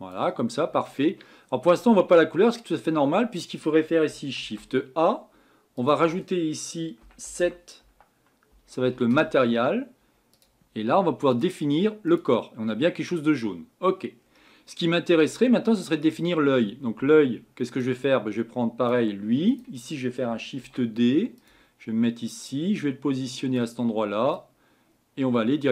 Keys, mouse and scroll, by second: 9.1 Down, 12.2-20.6 drag, 20.6 shift+d, 23.6 click.